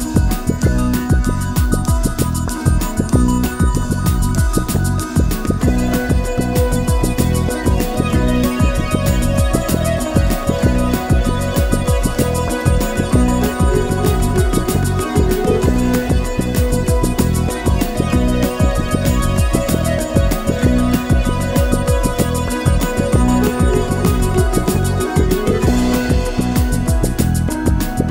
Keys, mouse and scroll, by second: 0.0-4.1 typing, 0.3 click, 0.6 click, 1.0 scroll down 1, 1.1 shift+middle drag, 1.3 click, 3.8 shift+middle click, 5.2-11.5 typing, 5.9 click, 6.2 click, 6.6 click, 6.9 shift+middle click, 7.0 click, 7.8 shift+middle click, 8.5 click, 8.9 click, 9.3 click, 9.7 click, 11.7 shift+middle drag, 11.9 click, 12.1 shift+click, 12.6 f, 12.9 click, 13.2 e, 13.5 1, 13.9 click, 14.4 alt+m, 14.5 click, 14.9 alt+m, 14.9-20.7 typing, 15.0 click, 15.1 shift+click, 15.3 click, 15.4 shift+click, 15.7 click, 15.9 shift+click, 16.0 click, 16.6 shift+middle drag, 16.9 click, 17.8 shift+middle click, 18.2 click, 18.4 shift+click, 19.1 ctrl+r, 19.4 click, 19.7 click, 20.0 click, 20.3 shift+middle drag, 20.6 click, 21.1-21.5 shift+middle drag, 21.5 scroll down 2, 21.9-28.1 typing, 22.9 Tab, 23.1 Tab, 23.1 middle click, 24.3 shift+middle click, 24.5 click, 25.0 click, 25.3 shift+middle click, 25.5 scroll up 1, 25.9 alt+click, 26.5 scroll up 1, 26.7 click, 27.2 click, 27.7 click, 28.0 click.